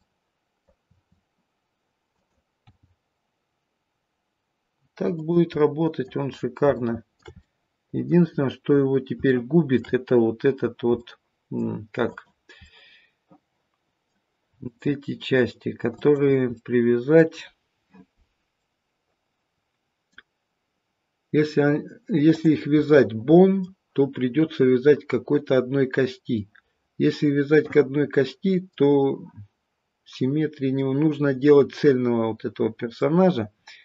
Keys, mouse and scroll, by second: 0.0 middle click, 0.8 r, 2.5 g, 5.6 middle click, 6.2-6.6 scroll down 2, 6.7 shift+middle click, 7.3 middle click, 8.3-9.1 scroll up 4, 9.2 shift+middle click, 10.9 middle click, 12.1 click, 13.9 middle click, 14.6 middle click, 14.6-15.8 scroll up 1, 16.6 middle click, 16.6 click, 18.6 middle click, 22.2 click, 22.8 middle click, 26.3 middle click, 30.0 middle click, 30.7-31.4 scroll down 1, 31.4 middle click, 33.5-33.8 scroll down 3.